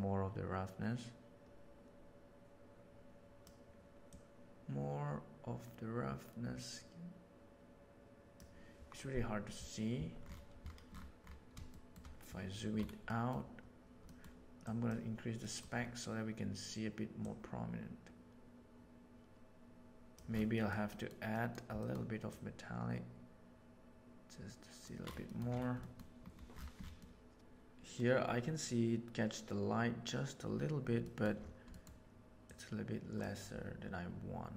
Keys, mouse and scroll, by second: 4.0-8.3 drag, 11.6-11.9 shift+middle drag, 13.1 middle click, 14.0 middle click, 14.6 click, 15.4 middle click, 17.2-20.1 drag, 20.4 middle click, 20.8 middle click, 21.2 middle click, 21.8 middle drag, 22.3-24.0 drag, 24.0 right click, 25.8 middle click, 27.0 middle click, 31.1 middle click, 32.4 click.